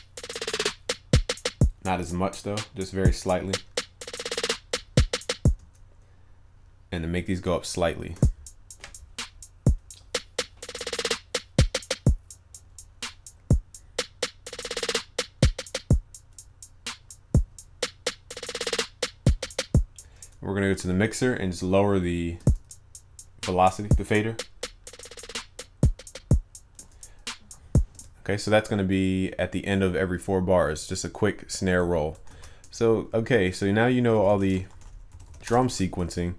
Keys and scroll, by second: 32.3 ctrl+s, 35.7 ctrl+s.